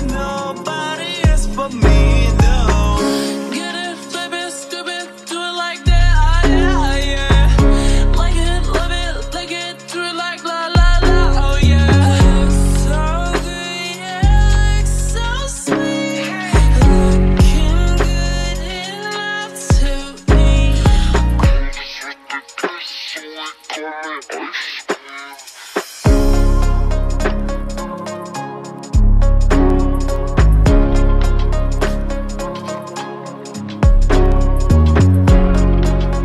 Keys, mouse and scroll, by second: 16.5 s.